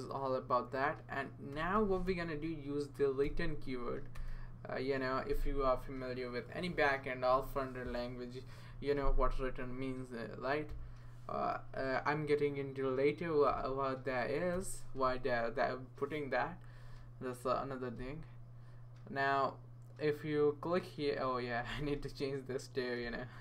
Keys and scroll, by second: 1.3-2.5 typing, 3.2 Return, 4.1 space, 10.7 m, 11.5 y, 13.5 f, 14.5 Return.